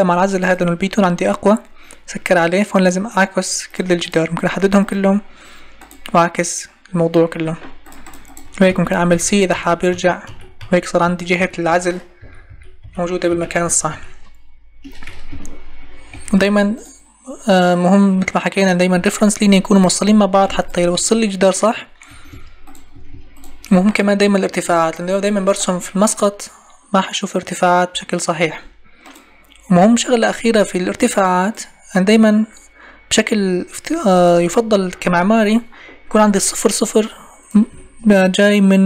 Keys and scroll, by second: 15.1 Escape, 18.7 Escape, 22.0 Escape.